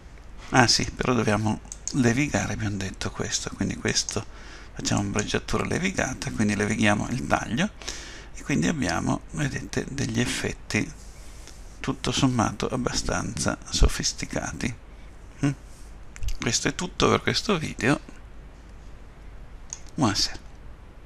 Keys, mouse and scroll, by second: 1.7 click, 3.9 right click, 7.1 middle click.